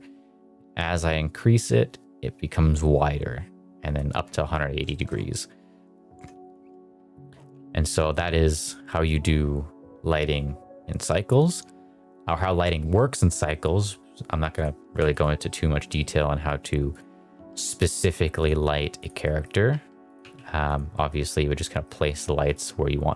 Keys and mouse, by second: 4.8 shift+middle click, 6.4 r, 7.4 g, 8.0 click, 8.1 r, 8.5 click, 14.5 click, 14.9 x, 16.8 click, 17.3 r, 18.0 g, 18.3 click, 18.5 r, 18.9 click, 19.1 middle click, 19.6 r, 20.0 click, 20.1 g, 20.6 click, 20.8 middle drag, 21.5 middle drag, 22.3 KP_0.